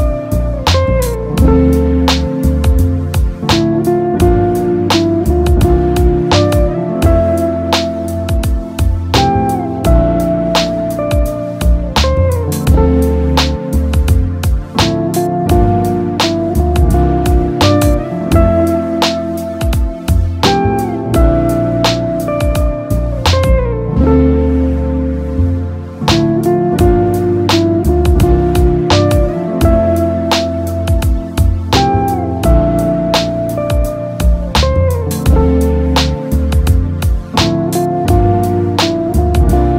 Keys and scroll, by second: 29.1 ctrl+c, 30.6 ctrl+f.